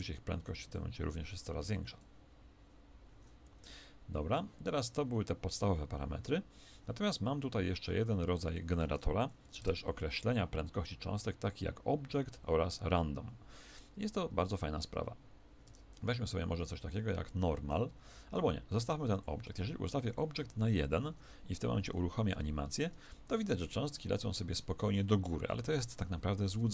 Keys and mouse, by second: 3.4 Escape, 8.5 click, 21.8 alt+a, 26.5 Escape.